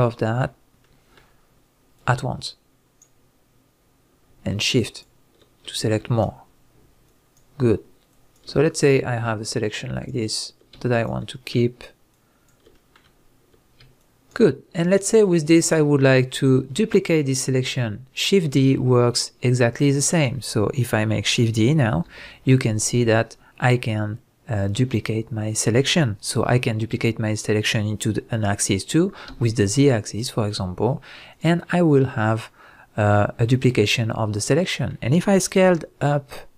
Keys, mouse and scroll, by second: 2.0 click, 4.4 shift+drag, 5.7 shift+click, 7.1-8.1 shift+drag, 8.6-9.5 middle drag, 9.5 shift+drag, 10.8-11.3 shift+drag, 11.3-12.1 middle drag, 12.1 shift+drag, 12.7-14.0 middle drag, 14.0 shift+click, 14.8-15.4 shift+drag, 16.0-16.9 shift+drag, 16.9-31.4 middle drag, 21.9 shift+d, 31.4 click, 31.6-36.5 middle drag, 35.6 s.